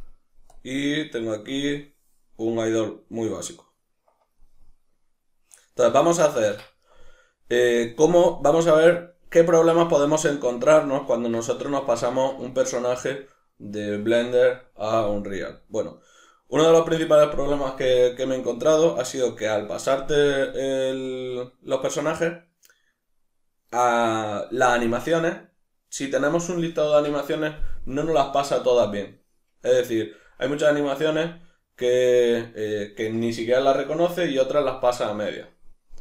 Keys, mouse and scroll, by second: 0.5 click, 6.6-8.2 middle drag, 8.2 click, 9.0-25.3 middle drag, 25.3 click, 27.1 Escape.